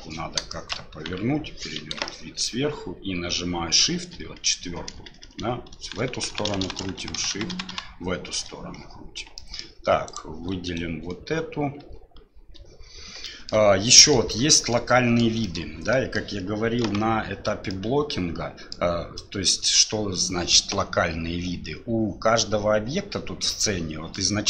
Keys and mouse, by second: 0.5 shift+click, 1.1 KP_1, 2.1 shift+click, 4.0-7.5 typing, 9.4 click, 10.1 click, 11.8 shift+KP_7, 13.2 shift+middle click, 13.8 middle click, 14.7 middle click, 15.4 middle click, 15.9 middle click, 16.8 KP_5, 17.7-18.7 middle drag, 19.2 click, 24.1-24.4 drag.